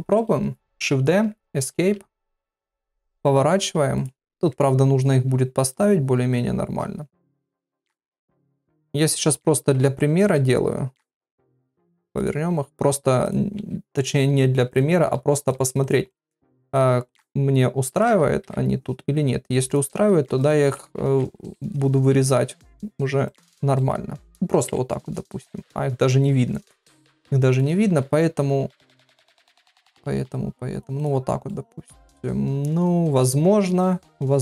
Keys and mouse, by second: 0.0 shift+middle click, 0.9 shift+d, 2.4 r, 4.5 KP_3, 6.3 KP_Divide, 7.1 click, 7.6 click, 8.1 g, 8.7 r, 9.7 ctrl+z, 10.2 KP_7, 11.1 r, 12.3 g, 13.5 r, 14.1 g, 15.1 r, 15.5 g, 16.3 middle click, 17.0 click, 17.2 g, 18.4 KP_3, 19.0 g, 19.9 r, 21.1 ctrl+z, 21.2 KP_7, 22.1 r, 22.7 g, 23.7 middle click, 24.7 KP_Divide, 28.0 g, 29.4 middle click, 30.3 click, 31.4-33.3 middle drag.